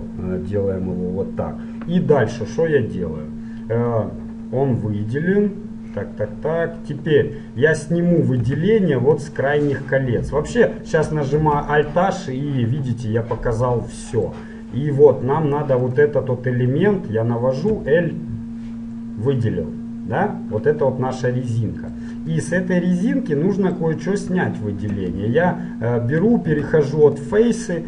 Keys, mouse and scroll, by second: 8.6 z, 11.5 alt+h, 12.1 middle click, 14.8-16.0 middle drag, 16.0-17.7 right drag, 17.7 l, 19.9 middle click, 22.5-24.3 middle drag, 25.1 ctrl+Tab.